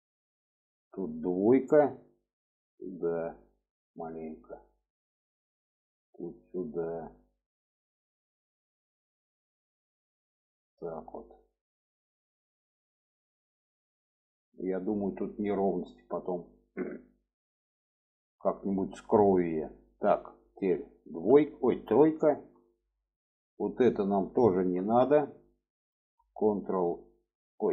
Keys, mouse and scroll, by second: 1.4 2, 1.9 click, 2.8-4.3 drag, 5.2 click, 5.8-7.2 drag, 7.8 click, 8.4-10.7 drag, 11.5 click, 12.2-13.8 drag, 15.1 middle click, 15.8-17.2 middle drag, 17.5-18.9 middle drag, 19.2 shift+middle click, 20.9 2, 22.2 3, 23.3 click, 24.1 middle click, 25.5 ctrl+click.